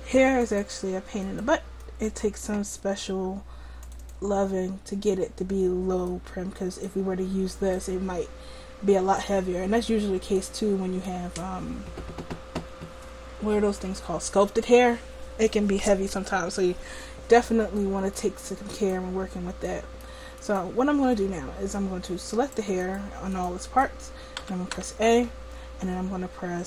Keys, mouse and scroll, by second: 0.5-2.1 drag, 6.2 click, 8.9-9.9 middle drag, 9.9-10.5 scroll up 1, 10.5-18.1 middle drag, 18.8-26.6 right drag, 24.5 a, 24.8 a.